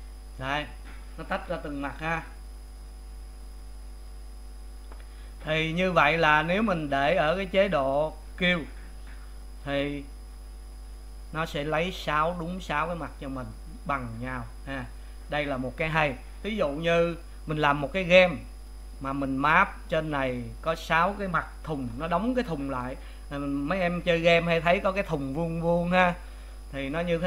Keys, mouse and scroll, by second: 1.6-3.5 middle drag, 3.5 click, 4.1 click, 5.3 click, 6.3 click, 10.9 a, 13.1-17.2 middle drag, 17.2 click, 17.8 middle click, 18.6 click, 26.7 middle click.